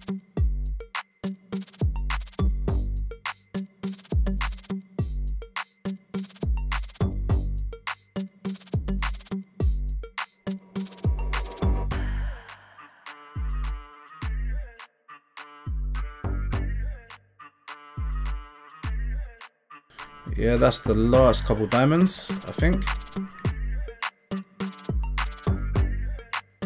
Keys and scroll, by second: 0.0-6.7 typing, 7.8-22.8 typing, 25.3 Tab.